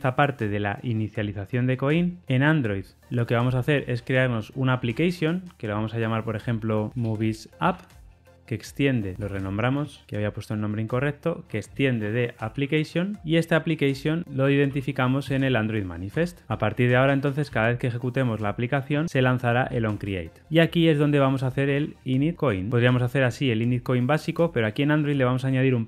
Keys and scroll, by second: 4.0 super+n, 9.1 shift+F6, 13.2 Return, 15.1 Return, 16.0 Return, 18.9 Return, 22.7 Return.